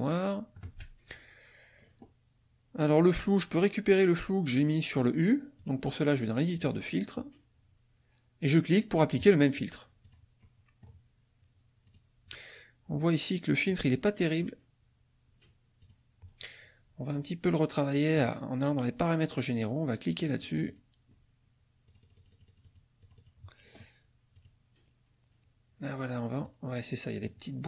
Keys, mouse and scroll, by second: 5.6 click, 6.6 click, 9.2 click, 10.0 click, 10.4 middle click, 11.9 click, 13.7 click, 15.8 click, 18.2 click, 20.2 click, 21.8 click, 23.0 click, 24.3 click, 26.4 click.